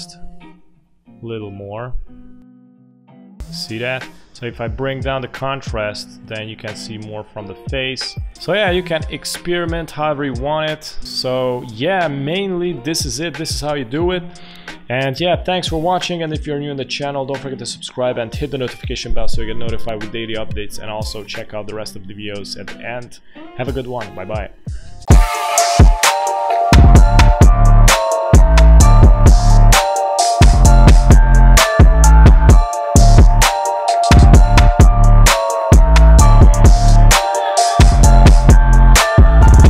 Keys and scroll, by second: 9.4 space, 11.1 space.